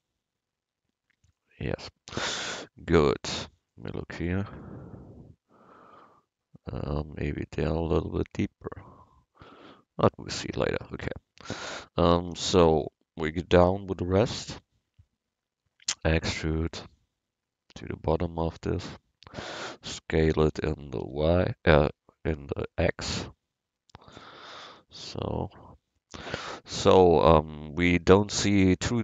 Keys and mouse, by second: 0.0-1.7 drag, 3.1 a, 3.5 c, 12.3 a, 12.8 b, 16.1 e, 20.6 s, 24.7 a.